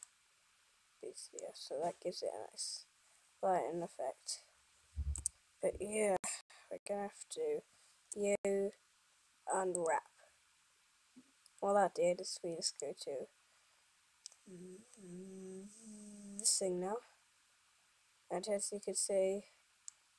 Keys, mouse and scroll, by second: 9.5 u.